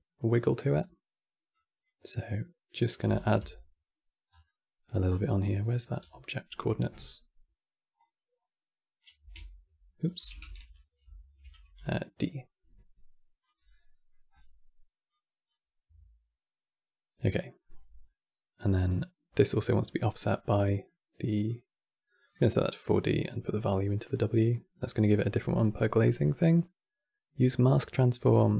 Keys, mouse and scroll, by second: 0.4-1.1 scroll up 6, 1.2-2.9 drag, 4.0 scroll down 5, 4.1-4.8 middle drag, 4.8 scroll down 6, 4.9-7.7 middle drag, 7.7 click, 8.9 x, 9.1-9.8 right drag, 9.9 click, 10.1 ctrl+z, 10.7 ctrl+z, 11.4 d, 11.6-13.1 right drag, 13.1 d, 13.3 d, 13.4 middle click, 14.0-14.8 scroll up 10, 14.8-17.2 drag, 17.2 middle click, 17.4-17.8 scroll up 6, 17.8 middle click, 18.6-19.4 scroll down 1, 19.4-21.1 middle drag, 21.1-23.0 drag, 25.7-28.5 middle drag.